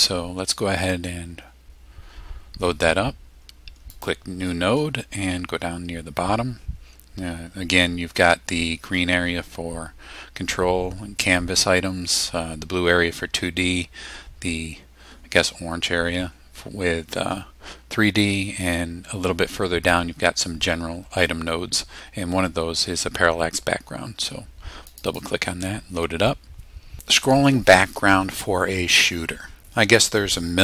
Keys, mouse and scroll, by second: 3.9 click, 5.2-6.6 scroll down 6, 7.0 scroll down 2, 7.1-7.9 scroll up 4, 8.2 scroll up 2, 10.6-10.9 scroll down 2, 11.5-11.8 scroll down 2, 12.0 scroll down 2, 12.9-13.7 scroll down 4, 14.8-15.2 scroll down 2, 16.7 scroll down 2, 17.2 scroll down 2, 24.9 click.